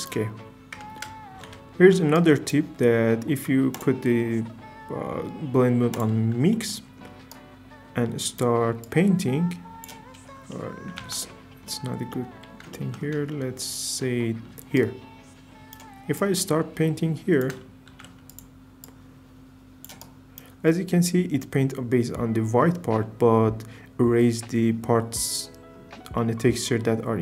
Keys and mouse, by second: 3.7-6.0 drag, 7.3 right click, 11.2 ctrl+z, 14.8 click, 17.9 shift+f, 18.3 click, 26.2 middle click.